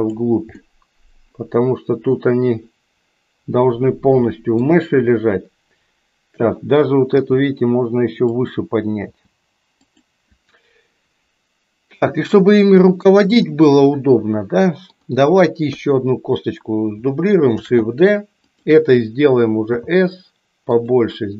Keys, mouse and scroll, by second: 0.6-4.8 middle drag, 4.8 KP_1, 7.1 g, 9.1 g, 13.4-15.2 middle drag, 15.7 KP_3, 17.6 shift+d, 19.6 s.